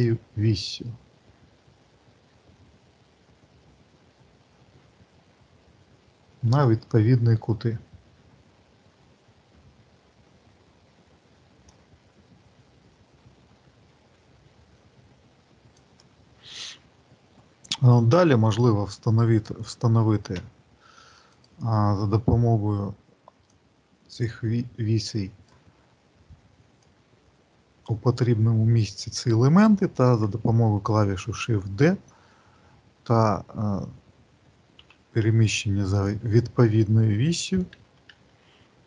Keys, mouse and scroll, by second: 21.2 click, 23.4 click, 26.7 click.